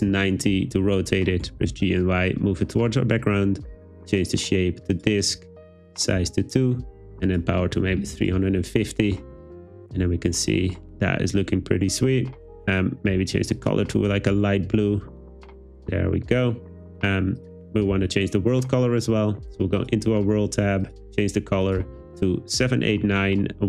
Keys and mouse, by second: 0.1 Return, 1.5 g, 1.7 y, 4.2-5.1 drag, 5.6 click, 7.4 click, 15.5 click, 20.9 click.